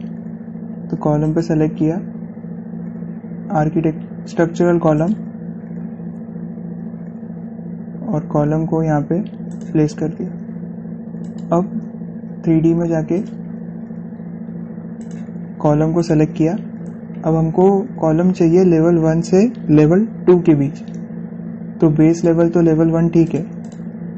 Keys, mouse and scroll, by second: 1.6-2.1 typing, 2.0 click, 5.8 click, 5.8 typing, 7.5-8.0 scroll down 1, 8.0 scroll up 1, 10.3 click, 14.9 scroll down 1, 15.5-15.8 scroll up 1, 15.8 click, 16.4 typing, 19.0-20.3 scroll down 1, 23.0 click.